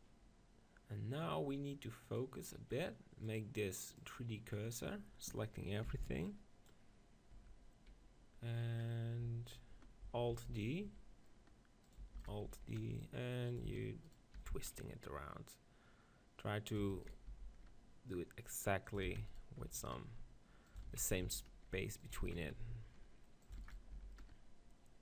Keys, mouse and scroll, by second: 2.0-5.9 drag, 5.9 b, 7.4 Tab, 8.8-10.5 middle drag, 10.3 alt+d, 10.7-11.7 drag, 10.9 r, 11.7-15.2 right drag, 11.9-14.0 drag, 12.2 alt+d, 12.5 r, 13.8 alt+d, 14.4 r, 15.2 click, 16.8 click, 17.1 alt+d, 17.1 right click, 17.3 r, 18.7 right click, 19.1 alt+d, 19.4-20.7 drag, 19.6 r, 20.9 alt+d, 21.2 r, 22.2 alt+d, 22.6 r, 23.6 alt+d, 23.9 r.